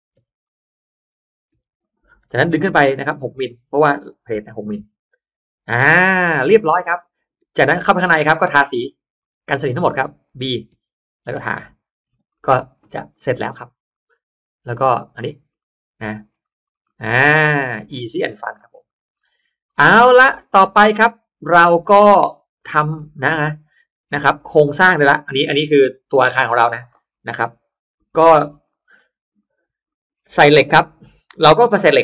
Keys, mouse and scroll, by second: 0.1 m, 0.3 click, 1.5 6, 1.7 Return, 2.5 middle click, 2.6 Return, 3.0 click, 4.2 6, 4.7 m, 5.1 Return, 5.5 space, 6.0 click, 6.4-7.1 scroll down 2, 6.5 middle click, 7.7 click, 7.9 click, 8.3 scroll up 1, 8.4 middle click, 8.5 scroll down 1, 9.1 click, 10.2-10.8 scroll up 1, 10.8 b, 11.3 click, 11.5 b, 11.9-12.3 scroll down 1, 12.0 space, 12.3 middle click, 12.6 Escape, 12.8 Escape, 13.1 middle click, 13.8 middle click, 14.9 click, 15.5 middle click, 16.3 scroll down 1, 16.5-17.4 scroll up 2, 16.7 middle click, 17.1 space, 17.6 click, 18.2-18.9 scroll down 2, 18.5 middle click, 18.7 click, 19.1 middle click, 19.1 scroll up 1, 19.3 scroll down 1, 19.6 middle click, 20.1 scroll down 1, 20.4 scroll up 1, 20.5 middle click, 20.9-21.9 scroll down 1, 21.5 middle click, 21.7 space, 21.9-22.5 drag, 22.7 middle click, 23.3-23.6 scroll up 1, 23.6 middle click, 24.3 middle click, 24.3-24.6 scroll up 1, 24.7-25.0 scroll down 1, 25.0-26.0 scroll up 2, 25.1 middle click, 25.7 middle click, 26.0-26.3 scroll down 1, 26.5 click, 26.8 middle click, 26.8-27.1 scroll up 1, 27.7-28.6 scroll up 2, 28.6 middle click, 28.7-30.5 scroll down 3, 29.3 middle click, 29.8 middle click.